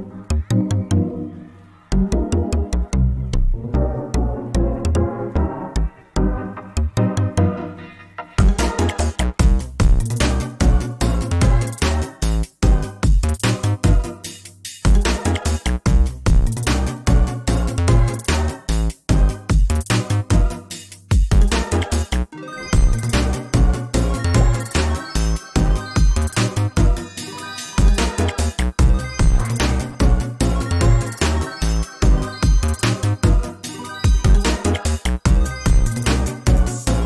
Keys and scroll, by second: 0.1 ctrl+space, 1.3 ctrl+space, 11.0 ctrl+space, 35.5 ctrl+v.